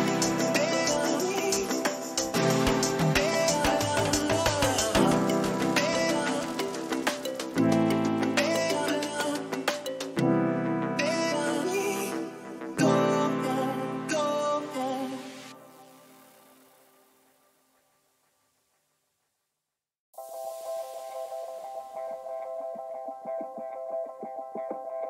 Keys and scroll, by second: 13.0 Return, 13.8 ctrl++.